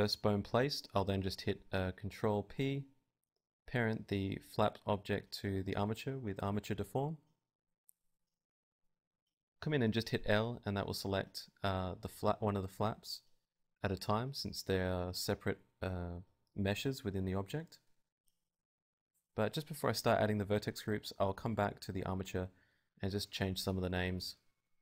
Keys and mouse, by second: 0.8 Tab, 1.5 click, 1.9 Tab, 1.9 n, 3.0 Tab, 3.0 n, 3.2 click, 3.6 z, 3.7 right click, 4.1 ctrl+p, 9.5-12.2 right drag, 10.3 Tab, 11.8 l, 12.2 middle click, 13.2 Tab, 13.3-14.4 right drag, 15.4 right click, 15.8 n, 16.0 Tab, 17.3-18.7 drag, 18.7-20.4 right drag, 19.1-20.4 drag, 21.1 middle click, 21.7 right click, 22.2-24.1 drag.